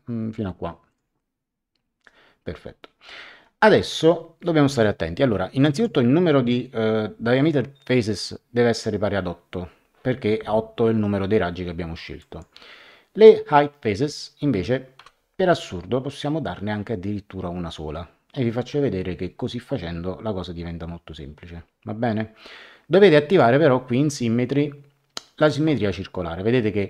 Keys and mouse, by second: 0.8 click, 5.6 click, 12.2 click, 14.9 KP_1, 23.3 click, 25.4 click.